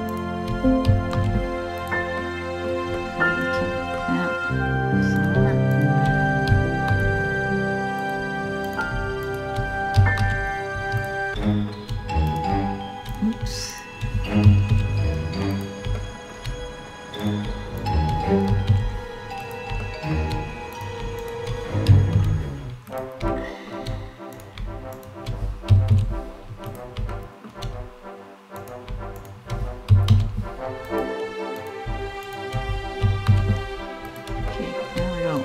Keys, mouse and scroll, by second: 0.7 alt+m, 1.8 middle click, 2.6 middle click, 3.0-3.3 scroll up 4, 3.6 middle click, 3.9 scroll up 2, 4.8 right click, 5.3 shift+right click, 6.4 alt+m, 8.3 right click, 8.9 shift+right click, 9.8 alt+m, 11.0 shift+middle click, 11.9 right click, 12.9 right click, 13.4 shift+right click, 14.3 alt+m, 15.5 shift+middle click, 16.2 scroll up 2, 16.9 right click, 17.4 shift+right click, 18.4 alt+m, 19.4 shift+middle click, 20.4 right click, 20.8 shift+right click, 21.8 alt+m, 22.9 shift+middle click, 24.0 right click, 24.5 shift+right click, 25.5 alt+m, 26.8 shift+middle click, 27.4 scroll up 2, 28.2 right click, 28.8 shift+right click, 29.7 alt+m, 31.2 right click, 31.9 shift+right click, 32.8 alt+m, 34.1 shift+middle click, 35.0 right click.